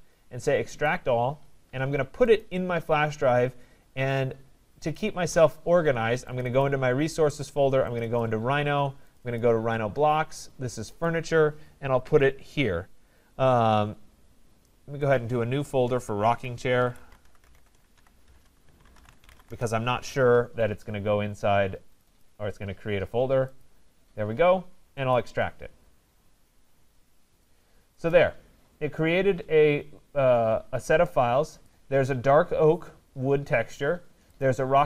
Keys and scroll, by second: 18.2 BackSpace, 19.4 Return.